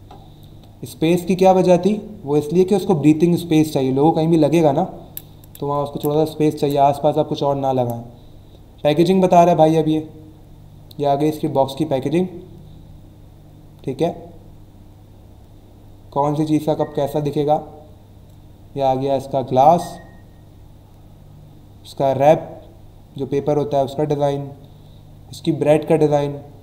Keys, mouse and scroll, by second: 7.4-8.0 scroll down 2, 8.6 scroll up 1, 8.8-9.6 scroll down 3, 13.2 scroll down 1, 14.2 scroll down 1, 14.8 scroll down 1, 17.0-17.6 scroll down 2, 19.7-20.2 scroll down 2, 20.7-21.3 scroll down 2, 23.8-24.4 scroll down 2.